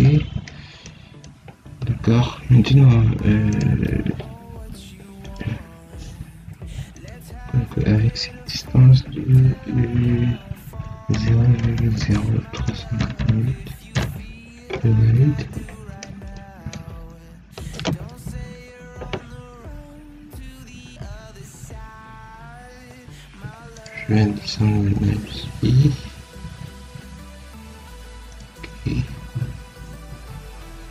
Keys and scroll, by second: 0.0 Escape, 11.0 0, 11.5 ., 11.8 0, 12.9 8, 13.9 Return, 16.3 Escape.